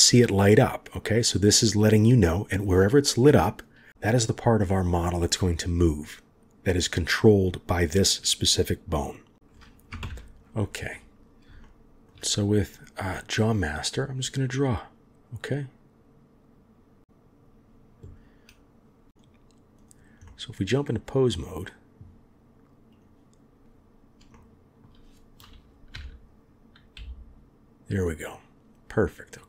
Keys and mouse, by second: 2.7-9.3 drag, 10.0 ctrl+KP_7, 11.6 shift+click, 14.4-17.4 drag, 19.2-19.9 drag, 20.3-20.9 middle drag, 23.0-24.3 drag, 24.3-24.8 shift+drag, 25.9 r.